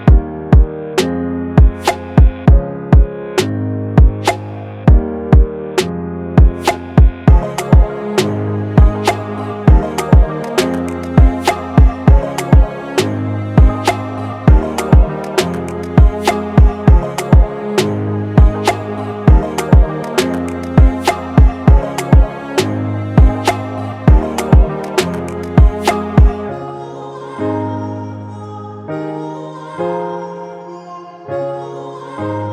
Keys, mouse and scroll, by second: 0.0-0.2 typing, 0.7 double click, 2.0 double click, 3.7 right click, 4.8-6.2 typing, 5.7 double click, 6.4 double click, 8.4 right click, 8.7 double click, 12.2 ctrl+-, 14.3 alt+scroll up 1, 15.2-15.7 alt+scroll up 1, 20.2-22.6 scroll up 1, 29.2 ctrl+t, 30.4 alt+shift+click.